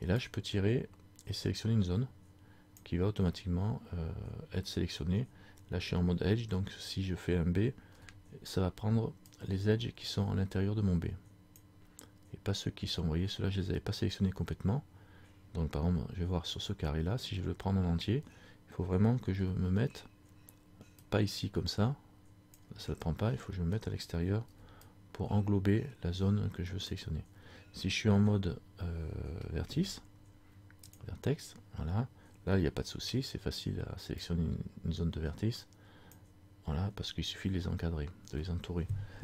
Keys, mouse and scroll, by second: 29.7 ctrl+Tab, 33.2 b.